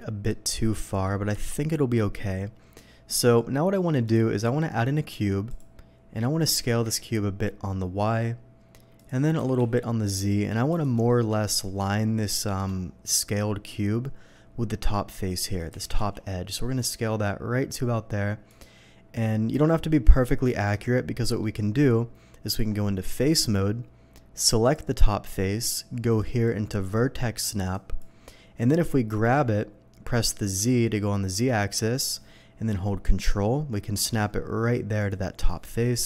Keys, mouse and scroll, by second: 0.3-0.8 middle drag, 1.4 KP_3, 4.1 shift+a, 5.5 click, 6.5 s, 8.0 y, 9.0 click, 9.4 s, 9.6 z, 10.7 click, 10.7 s, 11.1 middle click, 12.4 shift+middle drag, 16.0 z, 18.5 click, 18.8 middle click, 19.2-19.6 middle drag, 20.1 middle click, 20.5 shift+middle drag, 21.2 shift+middle drag, 22.5 Tab, 23.2 click, 24.6 click, 26.2 click, 27.7 click, 29.3 g, 30.5 z, 35.0 ctrl+click, 35.5 ctrl+middle click, 35.8-36.0 ctrl+middle drag.